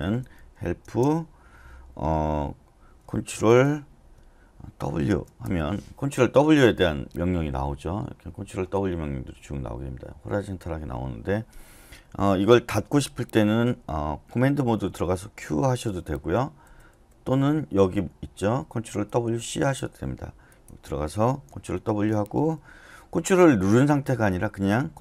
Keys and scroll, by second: 0.2-0.9 typing, 3.3 shift+6, 5.1 shift+w, 5.4 Return, 10.5 typing, 15.3-17.0 typing, 21.9 ctrl+w.